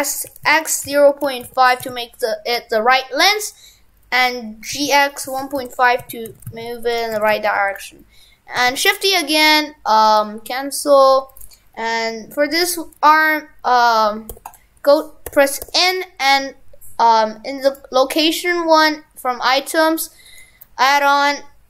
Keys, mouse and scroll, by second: 6.3 shift+f, 7.3 shift+f, 8.7 shift+d, 9.4 right click, 10.2 right click, 17.7 click.